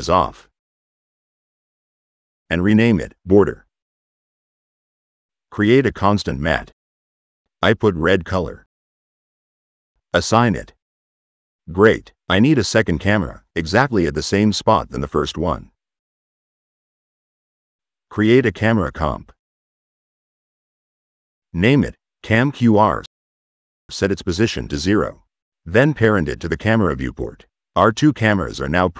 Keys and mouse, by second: 1.3 click, 1.7 right click, 5.1 click, 6.0 click, 6.7 click, 7.3 click, 8.4 click, 10.0 click, 14.6 click, 17.2 click, 18.9 click, 19.9 click, 22.2 click, 23.8 click, 24.7 click, 26.5 right click, 27.5-28.4 drag.